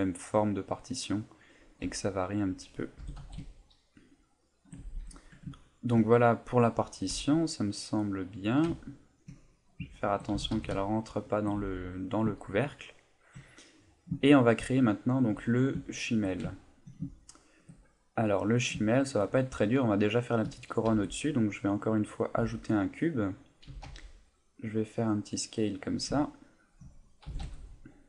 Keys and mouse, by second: 0.1 middle click, 1.8 Tab, 2.4 right click, 3.0 g, 4.6 shift+click, 4.8 a, 5.0 Tab, 5.6 ctrl+middle click, 6.3 middle click, 7.1 a, 7.6 click, 8.0 middle click, 8.8 ctrl+middle click, 9.6 right click, 9.9 shift+middle click, 10.3 g, 11.4 shift+click, 11.5 a, 12.9 ctrl+middle click, 13.5 middle click, 14.2 shift+middle click, 14.7 middle click, 15.3 KP_1, 15.9 shift+middle click, 16.5 ctrl+middle click, 17.1 shift+middle click, 18.4 click, 18.8 shift+middle click, 20.9 shift+a, 22.4 s, 23.2 click, 23.7 s, 24.8 click, 24.9 middle click, 26.1 ctrl+middle click, 26.5 middle click, 27.3 g.